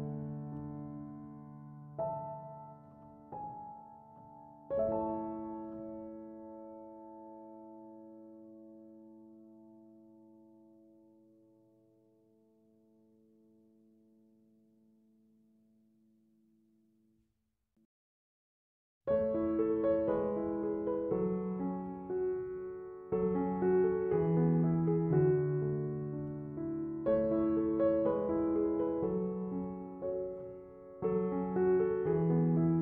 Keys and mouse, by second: 11.9-17.2 drag, 17.5-27.4 drag, 28.4-32.8 drag.